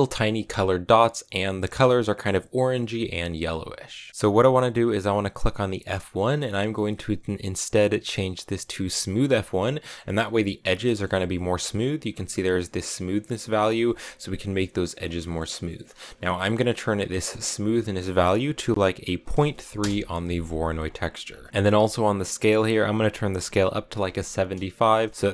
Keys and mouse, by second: 3.8 middle click, 6.0-9.1 drag, 10.7 shift+middle click, 12.0-14.6 drag, 15.1 middle click, 17.8-20.3 drag, 20.7 click, 21.3 middle click, 22.6-25.3 drag.